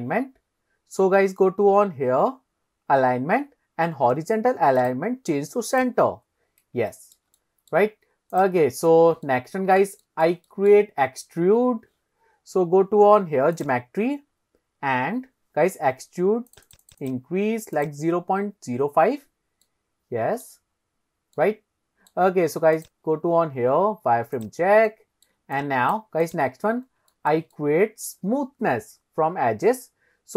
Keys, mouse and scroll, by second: 0.0 scroll down 1, 0.8-1.2 scroll down 2, 2.1 scroll down 2, 4.8 click, 5.3 click, 7.0 shift+middle drag, 7.4-7.7 middle drag, 8.4 click, 8.9-9.3 scroll up 1, 9.3-9.8 middle drag, 10.1 shift+middle drag, 10.5 middle drag, 12.4-13.1 scroll up 4, 13.6 click, 14.4-15.0 scroll down 1, 16.5 click, 16.7 click, 16.9 click, 17.1 click, 17.8 click, 19.7-20.5 middle drag, 20.8-21.4 scroll up 2, 21.4-22.1 middle drag, 22.8-23.3 drag, 24.9 shift+middle click, 25.6-26.0 drag, 26.3 click, 26.7-27.2 scroll up 2, 27.2 shift+middle drag, 27.6-28.1 middle drag.